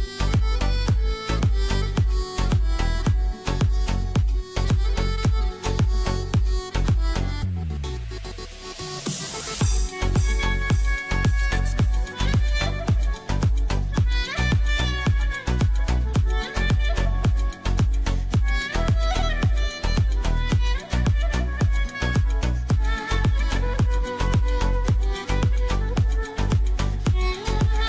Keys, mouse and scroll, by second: 3.3 click, 4.9 ctrl+e, 5.3 click, 6.4-10.2 drag, 11.1 click, 14.0 click, 14.8 right click, 15.3-27.0 drag.